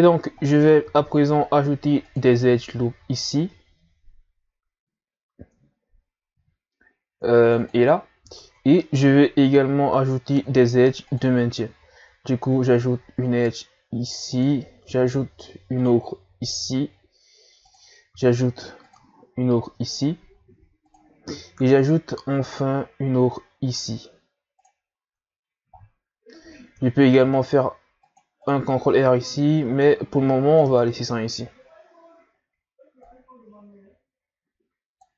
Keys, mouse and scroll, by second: 0.8 ctrl+r, 2.8 scroll up 2, 6.3 ctrl+r, 8.3-9.0 shift+scroll up 1, 10.6 ctrl+r, 14.8 ctrl+r, 18.1 ctrl+r, 21.3 ctrl+r, 27.2 ctrl+r, 29.6 ctrl+z, 30.6 Tab, 31.0-31.6 scroll down 3, 31.6-34.1 scroll down 1.